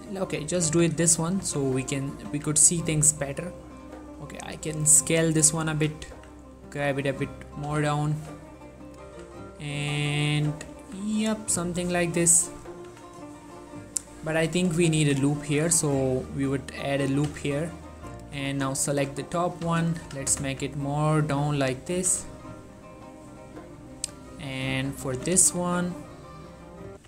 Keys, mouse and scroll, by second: 0.3-0.8 scroll up 1, 0.8-3.2 typing, 5.7 click, 5.8 g, 6.2 z, 7.4 click, 7.8 z, 8.2 shift+middle click, 8.8 click, 9.2 z, 10.4 g, 10.8 z, 11.9 click, 12.3 z, 12.6 Tab, 13.0 z, 14.3 z, 14.5 Tab, 15.1 ctrl+r, 16.1 click, 17.1 right click, 17.4 z, 17.9 click, 18.4-20.5 typing, 19.6 click, 21.4 click, 22.1 s, 22.3 x, 23.9 click, 25.2 s, 25.5 x, 26.6 right click.